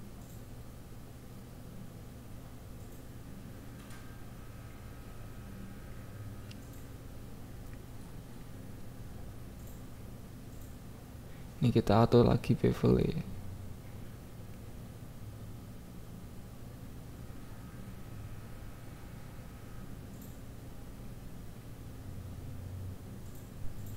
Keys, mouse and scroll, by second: 1.1 click, 1.4 click, 2.0 ctrl+s, 5.5 ctrl+s, 6.0 click, 6.4 KP_1, 6.7 click, 7.2 click, 7.5 click, 7.7 click, 9.4-10.8 shift+drag, 11.0 KP_1, 11.3 click, 11.7 ctrl+s, 13.8 click, 14.0 Tab, 14.3 alt+z, 14.5 click, 15.3 g, 15.4 x, 15.8 click, 16.1 click, 16.3 Tab, 16.8 ctrl+s.